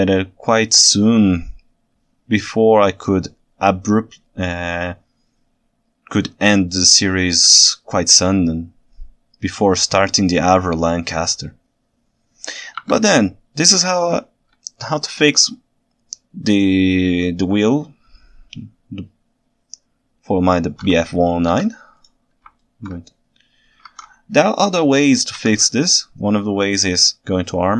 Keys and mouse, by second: 14.7-20.8 ctrl+shift+right drag, 21.5 shift+s, 22.6 ctrl+alt+right drag, 23.9 ctrl+Tab, 24.7 KP_1, 24.8 middle click, 25.5 Tab.